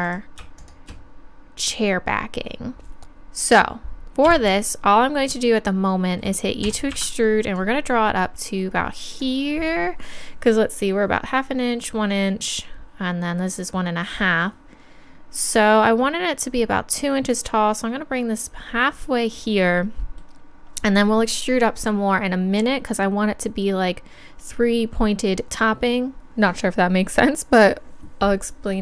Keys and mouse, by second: 4.3 KP_3, 6.6 e, 7.6-9.3 drag, 17.3-19.2 drag.